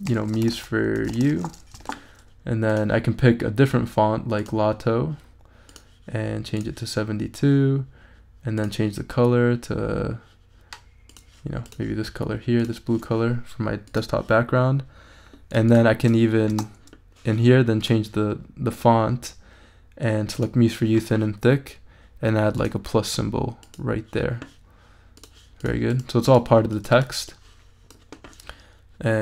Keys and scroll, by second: 0.0-1.8 typing, 1.9 shift+super+a, 2.5 super+a, 16.5 space.